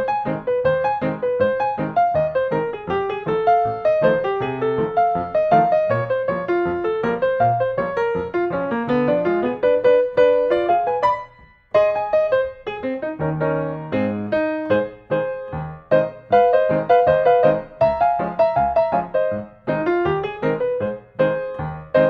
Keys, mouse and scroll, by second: 1.8-2.9 drag, 3.2 middle click, 3.2 scroll, 4.5 click, 7.1 scroll, 7.8 click, 9.3 click, 10.8-11.9 drag, 13.3-14.4 drag, 15.9-16.6 scroll, 17.4 click, 18.2-18.6 scroll, 19.5-20.5 scroll, 20.7 click.